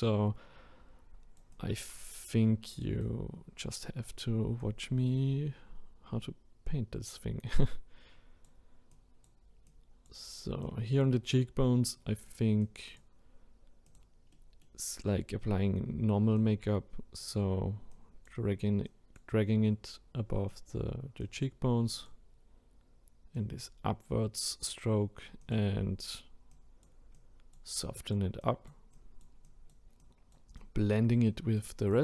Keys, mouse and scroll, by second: 0.1-7.6 drag, 8.9-14.3 drag, 14.3-16.3 middle drag, 16.3-24.2 drag, 24.2-25.4 scroll down 1, 25.4-32.0 drag.